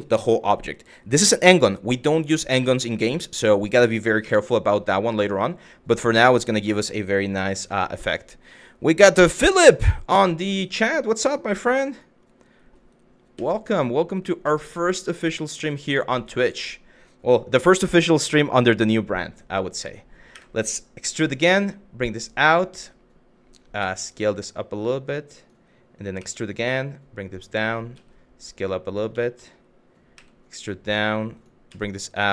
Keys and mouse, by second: 3.8 KP_1, 10.3 e, 11.6 click, 13.0 s, 15.3 click, 15.6 middle click, 20.0 e, 21.8 click, 23.4 s, 25.0 click, 25.8 e, 27.3 click, 27.6 s, 28.5 click, 28.9 middle click, 29.8 e, 31.0 click, 31.3 s.